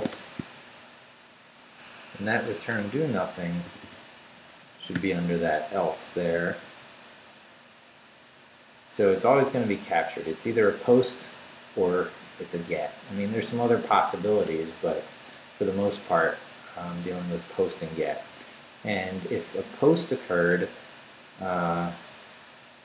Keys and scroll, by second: 0.0-0.6 typing, 1.8 Up, 2.7 Escape, 3.6 d, 5.0 shift+p, 5.8 Up, 6.5 Left, 7.2 Up, 7.7 Up, 8.5 Up, 9.0 Up, 9.8 Up, 10.5 Down, 17.7 Down, 18.9 Up, 20.2 Down.